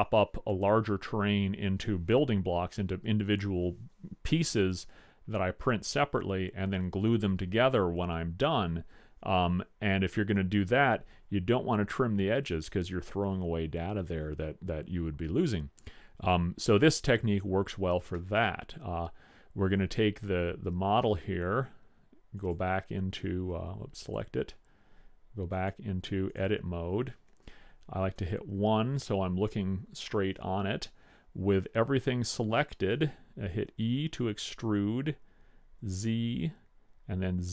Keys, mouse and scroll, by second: 18.3-20.1 middle drag, 22.5 click, 28.3 KP_1, 35.1 e.